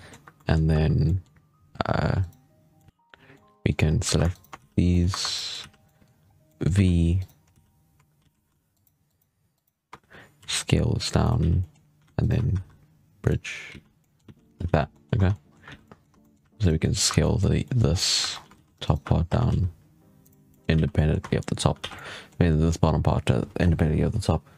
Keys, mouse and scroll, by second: 0.1 1, 0.3-0.6 middle drag, 0.6 2, 0.9 middle click, 1.6 3, 2.1 right click, 2.7-3.8 middle drag, 3.8 scroll up 2, 3.9 2, 4.2 shift+right click, 4.5 z, 4.8 middle click, 5.0 1, 5.2 middle click, 5.5 z, 5.7 middle click, 6.1 scroll up 1, 6.4 middle click, 6.6 v, 7.4 z, 8.1 alt+a, 8.6 alt+shift+right click, 9.0 alt+shift+right click, 9.4 alt+shift+right click, 10.3 s, 11.3 z, 11.5-12.1 middle drag, 12.1 alt+shift+right click, 12.4 w, 13.6 z, 13.9 middle click, 14.1 z, 14.5 alt+a, 14.6 scroll down 1, 14.8 middle click, 15.0 Tab, 15.2-15.5 middle drag, 15.5 alt+a, 15.7 middle drag, 16.0 Tab, 16.1 middle drag, 16.3 3, 16.5 right click, 16.7 middle drag, 16.9 2, 17.1-17.8 middle drag, 17.8 scroll up 1, 17.9 middle click, 18.1 2, 18.4 alt+a, 18.7 alt+shift+right click, 19.1 s, 20.4 middle drag, 20.5 scroll down 2, 20.6 alt+a, 20.8 middle drag, 21.1 Tab, 21.2 middle drag, 21.4-21.8 scroll down 3, 21.6 alt+a, 21.8-24.5 middle drag.